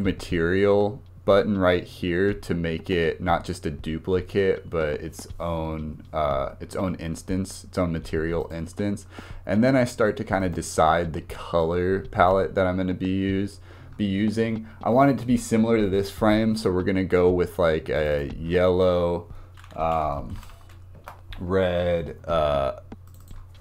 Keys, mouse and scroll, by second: 8.4-9.8 drag, 10.4-10.9 drag, 17.9-20.3 drag, 20.3 l, 23.1-23.6 drag.